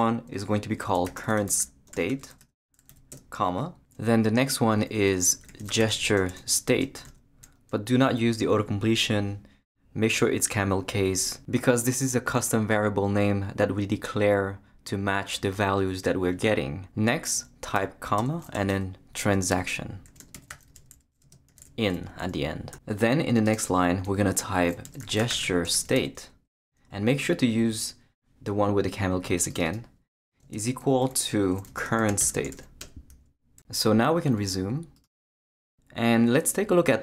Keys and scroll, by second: 0.7-3.4 typing, 5.1-7.5 typing, 17.8-21.6 typing, 24.6-27.1 typing, 27.6 Down, 30.4 space, 31.4-33.0 typing.